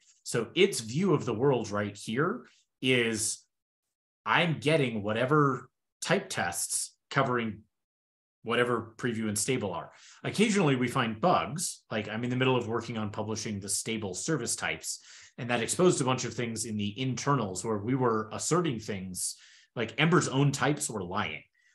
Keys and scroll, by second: 2.4 super+w, 3.0 super+w.